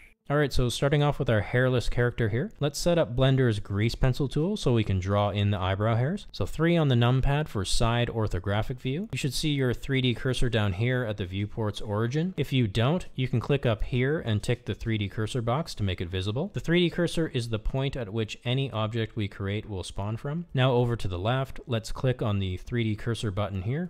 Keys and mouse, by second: 6.6 KP_3, 8.0-8.7 shift+middle drag, 9.9 shift+middle click, 14.7-20.1 drag.